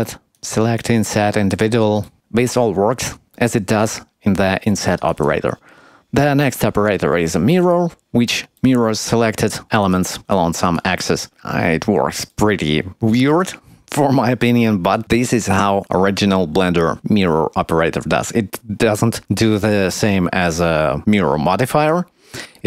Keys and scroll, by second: 22.5 shift+a.